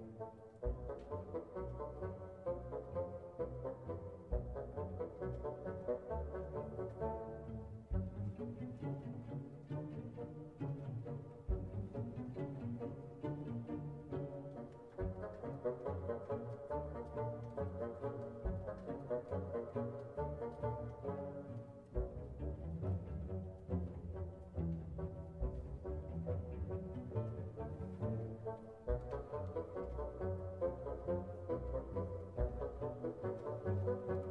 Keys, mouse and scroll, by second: 13.9-15.4 drag, 17.1 click, 19.3 click, 20.5 click, 21.5 click, 24.6 click, 26.0 click, 27.4 scroll down 1, 27.9-28.3 scroll up 1, 29.3-29.7 scroll down 1, 30.2 scroll up 2, 31.0-31.3 scroll up 2, 32.2 scroll down 1, 33.7 click.